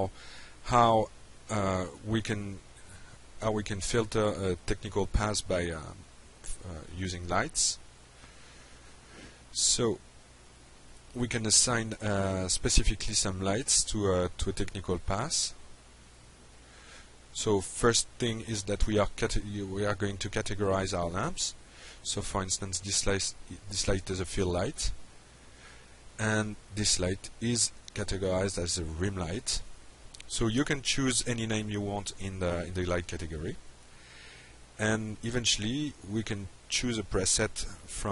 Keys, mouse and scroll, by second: 6.9 click, 10.7 click, 11.5 click, 18.2 click, 18.8-19.5 drag, 21.4 click, 22.3 click, 22.8 click, 24.7-25.3 drag, 28.4 click, 29.7 click, 31.3 click, 32.8 click, 33.3 click, 36.9 click.